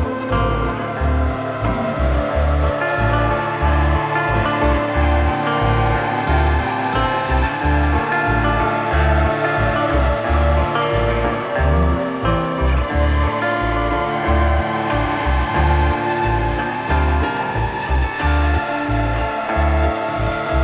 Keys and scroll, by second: 8.7 shift+Page_Down, 11.7 Escape, 18.8 Escape.